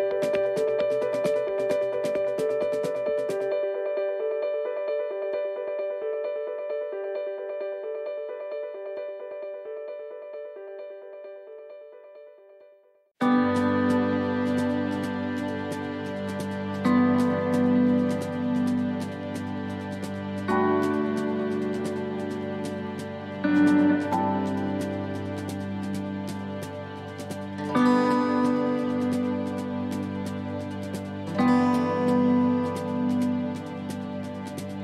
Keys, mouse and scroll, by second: 0.0 right click, 1.0 scroll down 3, 1.8 right click, 2.3 right click, 3.0 right click, 3.9 right click, 5.7 right click, 5.7 click, 6.8 right click, 7.8 click, 9.0-9.6 scroll up 2, 10.0 right click, 10.6 middle click, 12.2 click, 13.3 right click, 14.5 click, 16.8 middle click, 17.5 scroll down 1, 18.2 middle click, 18.7 shift+middle click, 19.6 middle click, 20.5 scroll down 3, 20.9 shift+middle click, 21.5 scroll down 2, 22.0 shift+middle click, 22.4 scroll down 1, 23.2 click, 24.1 scroll up 5, 25.2 shift+right click, 26.8 right click, 27.8 shift+right click, 30.4 right click, 31.9 right click, 32.3 shift+right click, 32.4 shift+right click.